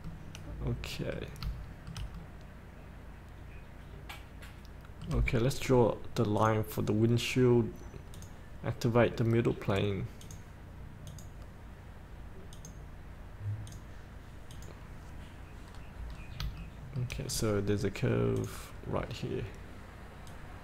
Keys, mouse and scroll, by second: 0.3-2.2 middle drag, 2.5-6.1 middle drag, 6.6 click, 15.9 scroll down 1, 16.9 shift+middle click, 18.6 click, 19.3 scroll down 1, 20.5-20.6 drag.